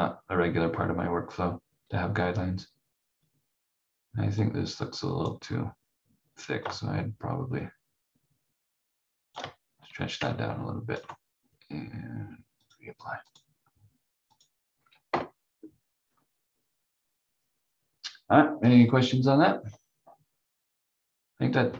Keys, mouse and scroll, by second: 4.4 click, 15.1 F4.